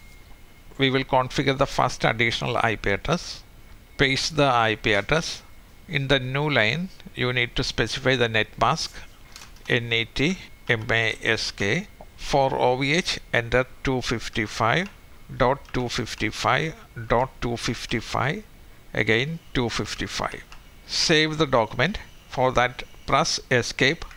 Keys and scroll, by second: 20.3-21.0 typing.